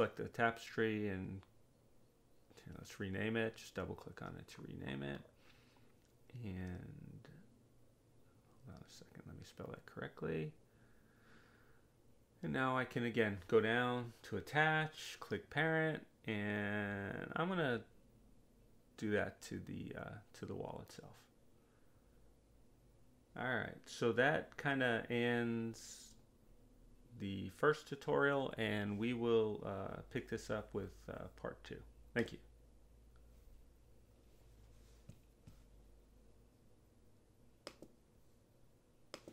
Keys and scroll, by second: 2.3-4.7 typing, 9.1 Right, 9.8 BackSpace, 10.0 e, 11.0 Return.